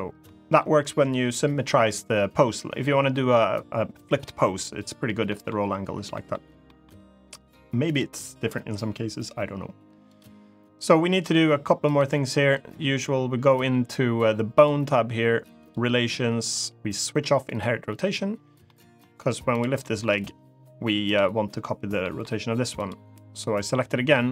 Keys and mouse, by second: 0.0-0.3 middle drag, 5.0 middle click, 5.9 middle drag, 6.4 middle drag, 7.6 click, 9.8 click, 14.3 click, 15.3 click, 17.2 click, 18.4 middle click, 19.5 middle click, 19.8 g, 20.8 right click, 21.7 middle click, 22.5 click.